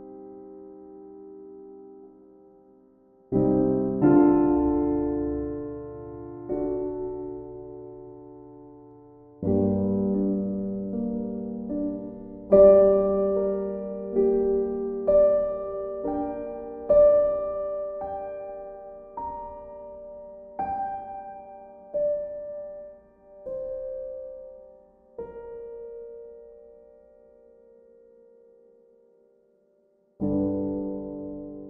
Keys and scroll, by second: 0.0 e, 22.2 e.